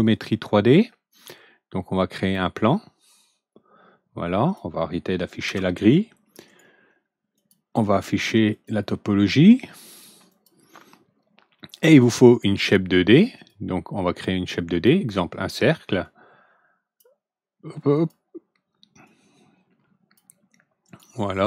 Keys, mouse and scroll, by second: 2.2 click, 3.1-4.5 drag, 5.4 ctrl+g, 6.4 right click, 7.3 click, 8.4 click, 9.8 click, 10.2 click, 12.2 click, 13.3 click, 16.0-16.9 drag, 17.9 click, 19.0-20.1 drag, 20.8 right click.